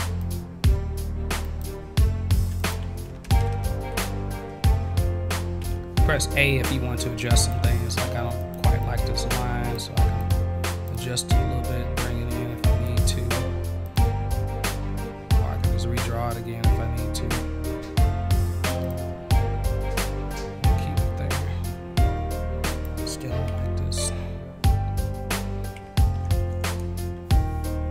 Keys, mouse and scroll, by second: 0.2 click, 1.4 click, 2.6 click, 5.6 a, 7.4 click, 8.4 click, 8.8 click, 10.2 click, 10.7 click, 10.9-12.8 drag, 13.8 click, 14.0-18.7 drag, 18.8 click, 22.7 click, 24.6 v.